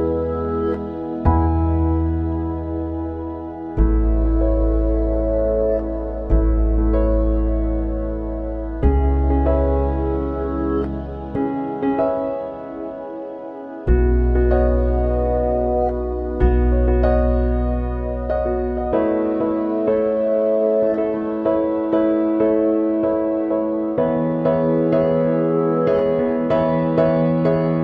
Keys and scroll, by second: 7.2 ctrl+c, 7.3 ctrl+v.